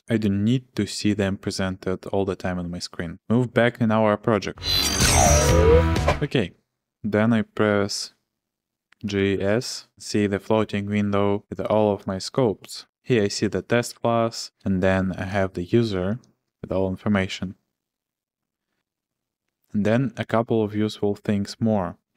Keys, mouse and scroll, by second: 9.0-9.3 typing, 11.3-15.0 typing, 13.9 Return, 15.3 Return.